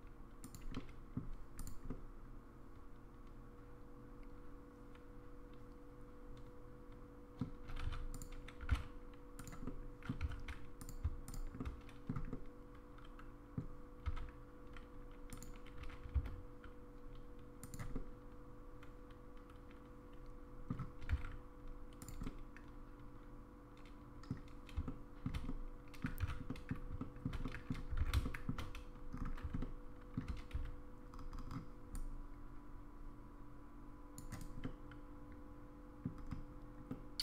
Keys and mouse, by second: 0.8 middle click, 1.9-7.4 middle drag, 8.2 click, 8.2 1, 8.6 g, 9.7 middle click, 10.2 3, 11.3 shift+click, 11.6 shift+middle click, 12.3-13.6 middle drag, 14.1 e, 15.8 g, 17.9-20.7 middle drag, 21.0 g, 22.2-24.3 middle drag, 24.8 shift+middle click, 25.5 middle click, 26.5 middle click, 26.5 1, 27.0 middle click, 27.4 middle click, 28.0 alt+z, 28.2 shift+middle click, 29.6 middle click, 30.5 c, 34.6-36.1 middle drag, 36.9-37.2 middle drag.